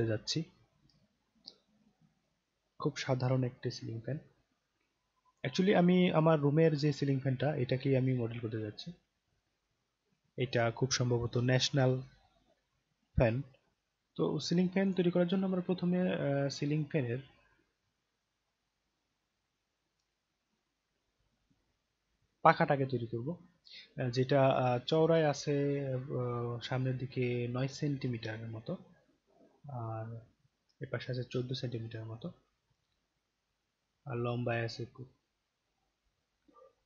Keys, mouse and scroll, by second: 5.3 click, 14.9 click.